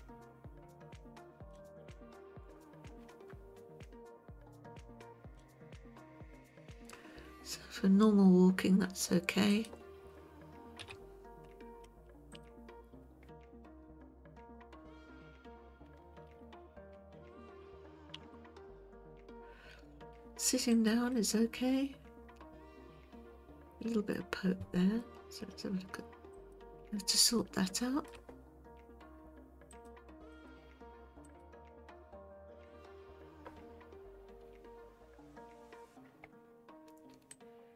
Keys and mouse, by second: 10.8 KP_3, 12.3 shift+click, 16.3 alt+r, 18.2 r, 21.1-25.0 middle drag, 26.5 click, 27.4-28.1 shift+middle drag, 29.7-30.5 drag, 31.3 click, 32.7 Tab, 37.3-37.7 drag.